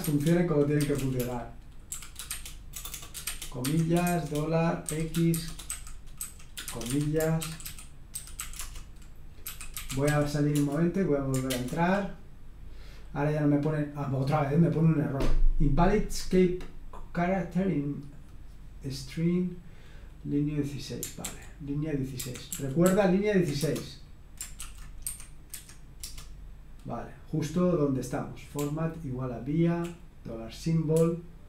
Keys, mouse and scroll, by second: 0.0-8.4 typing, 3.6 Escape, 9.7-11.5 typing, 21.2 ctrl+o, 22.2 ctrl+o, 22.5 ctrl+p, 22.8 ctrl+p, 23.6 Return, 24.4-26.0 typing, 28.5-29.7 typing, 30.9-31.4 typing.